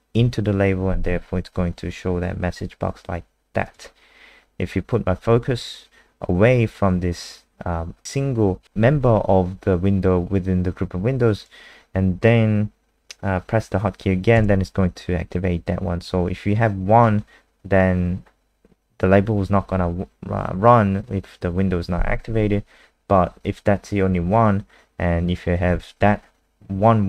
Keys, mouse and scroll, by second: 3.6 click, 14.3 KP_0.